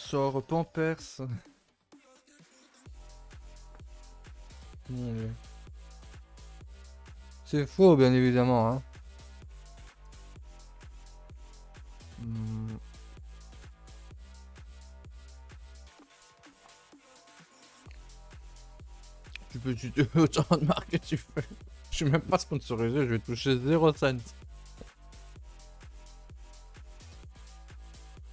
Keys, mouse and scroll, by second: 9.9 click, 10.2 a, 10.3 a, 10.7 shift+middle click, 11.0 scroll up 1, 11.2-12.3 scroll down 2, 12.3 scroll up 1, 12.6 scroll down 2, 12.8-13.3 scroll up 4, 13.3-13.6 shift+middle drag, 13.6-14.1 scroll up 1, 14.1 click, 14.4 shift+middle drag, 14.6-15.1 scroll down 4, 15.2 shift+middle drag, 15.4-16.0 scroll up 2, 26.3 KP_0, 26.9-27.3 scroll up 1, 27.3-27.9 shift+middle drag, 27.9 z, 28.1 middle click.